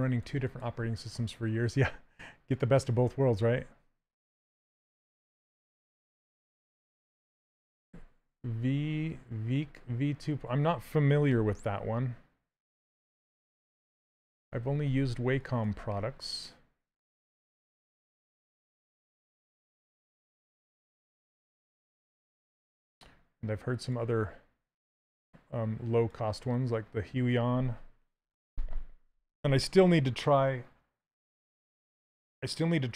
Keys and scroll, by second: 11.0 w.